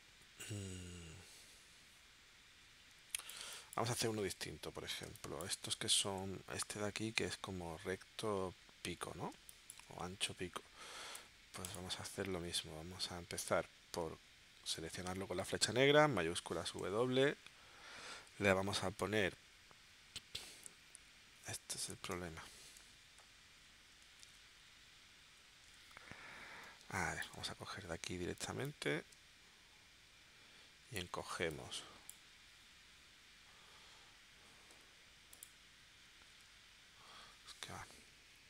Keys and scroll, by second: 5.1 space, 9.3 space, 11.1 v, 15.4 v, 16.2 shift+w, 22.1 space, 22.8 v, 24.2 shift+w, 26.8 space, 31.3 space, 34.7 a, 36.3 shift+w.